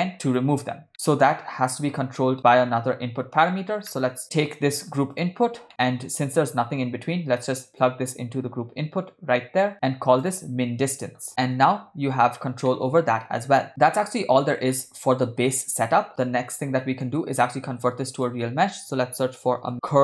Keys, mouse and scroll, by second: 0.9 middle click, 3.9 middle click, 4.2 ctrl+middle click, 5.2 click, 5.7 middle click, 7.9-9.7 drag, 10.2 click, 10.3-11.6 drag, 12.7 middle click, 13.7-14.5 ctrl+middle drag, 14.8-15.3 shift+middle drag, 16.3 click, 16.9 middle click, 17.7 shift+a.